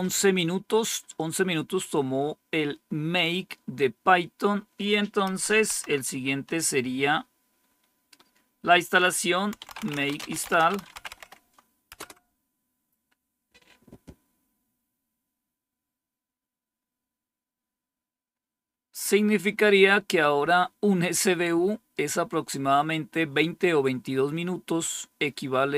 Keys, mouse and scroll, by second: 5.2 Up, 5.6 Down, 7.5-8.3 scroll down 1, 8.8 click, 9.3-11.8 typing, 18.1-21.4 scroll up 1.